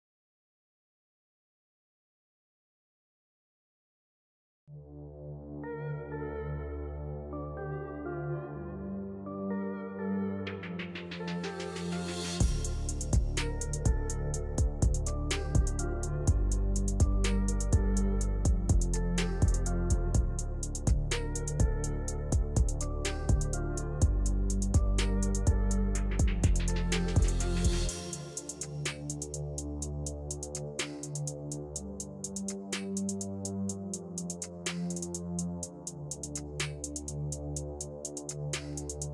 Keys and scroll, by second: 1.2 shift+Page_Down.